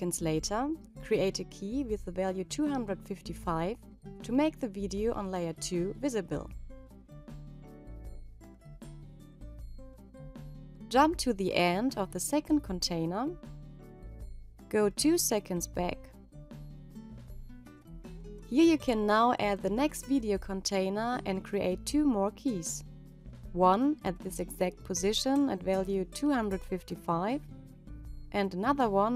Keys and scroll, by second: 11.0 ctrl+Right, 17.9 -.